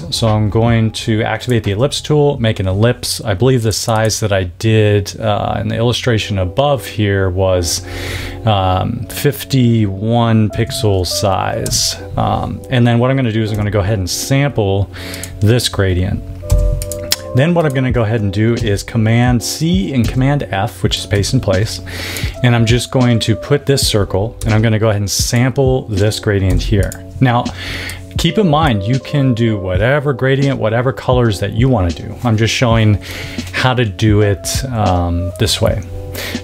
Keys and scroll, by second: 10.2-11.1 typing, 11.6 Return, 13.4 i, 16.4 v, 18.5 super+c, 19.9 super+f, 24.3 i, 26.4 v.